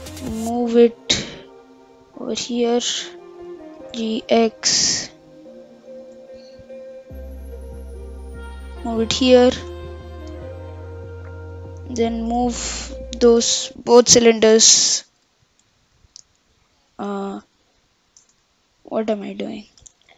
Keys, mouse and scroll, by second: 2.7-3.7 shift+middle drag, 3.7 g, 6.0 shift+d, 9.7 KP_7, 10.2-10.7 scroll down 5, 10.7-11.8 scroll up 1, 13.4 shift+click, 14.6 y, 16.0 ctrl+z, 17.2 shift+z, 18.3 shift+z, 19.9 ctrl+shift+z.